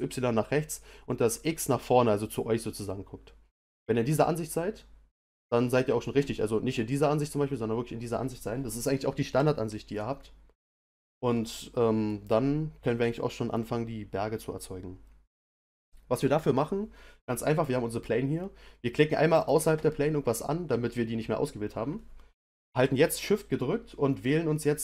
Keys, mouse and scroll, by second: 3.5-16.2 middle drag, 19.4 click, 24.5-24.8 shift+middle drag.